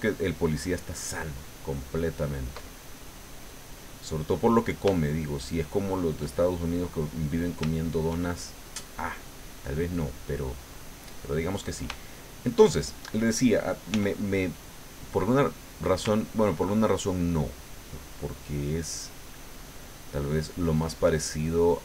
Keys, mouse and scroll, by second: 3.0-4.2 middle drag, 4.5 middle click, 5.0 shift+middle click, 5.6 shift+middle click, 6.3-7.5 shift+middle drag, 7.6 shift+click, 9.5 middle click, 10.3-11.9 drag, 11.9-13.2 shift+middle drag, 13.9 f, 14.5 click, 16.1-18.4 ctrl+drag, 18.8-20.8 ctrl+drag, 20.9-21.8 ctrl+middle drag.